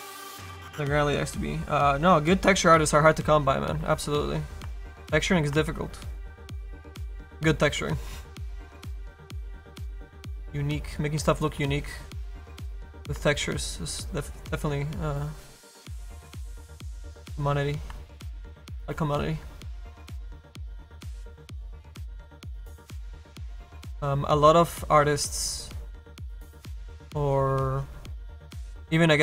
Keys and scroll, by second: 18.7 s, 25.0 s.